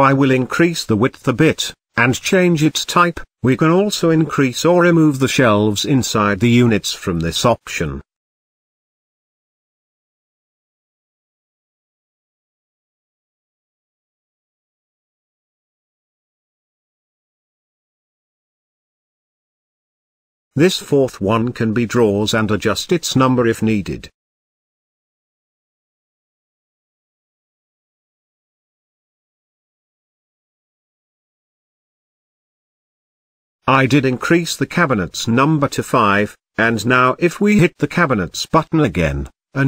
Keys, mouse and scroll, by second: 2.7-4.6 drag, 6.6-7.1 scroll up 5, 7.7 alt+z, 9.2-9.6 shift+middle drag, 9.6 z, 12.8 click, 14.5-16.4 drag, 17.3 z, 17.8 alt+z, 18.3-19.6 scroll down 6, 19.6 scroll down 1, 19.9-21.7 shift+middle drag, 21.7-22.6 scroll down 3, 22.6-24.5 drag, 27.6-28.0 scroll up 5, 29.1 click, 29.7-30.1 scroll down 2, 30.1-31.3 shift+middle drag, 31.3-31.7 scroll down 2, 31.7-33.2 shift+middle drag, 33.2-33.6 scroll up 2, 33.6-35.5 shift+middle drag, 36.9-38.7 middle drag, 38.7 n.